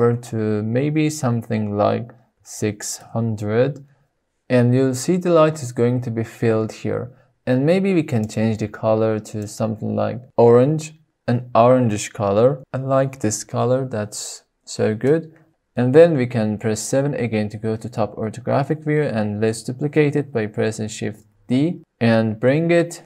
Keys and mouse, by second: 2.5 KP_0, 17.4 KP_7, 21.5 shift+d.